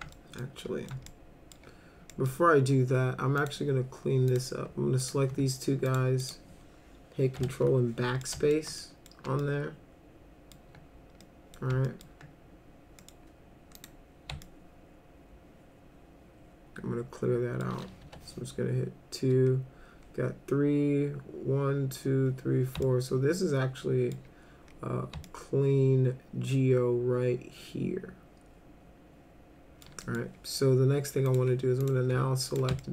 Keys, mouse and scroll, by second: 0.1 alt+middle click, 0.6 alt+middle click, 1.1 alt+middle click, 2.1 middle click, 3.4 click, 4.3 click, 5.0 ctrl+click, 5.9 ctrl+click, 6.2 ctrl+click, 7.4 ctrl+BackSpace, 8.2-8.5 alt+middle drag, 8.8 middle drag, 9.4-10.5 alt+middle drag, 11.2 middle click, 11.9 alt+middle click, 13.0 middle click, 13.7 click, 14.4-17.6 alt+middle drag, 18.0 1, 22.8-24.1 alt+middle drag, 25.2-29.8 alt+middle drag, 30.0 middle click, 31.3 click, 31.8 click, 32.5 ctrl+click, 32.8-32.9 alt+middle drag.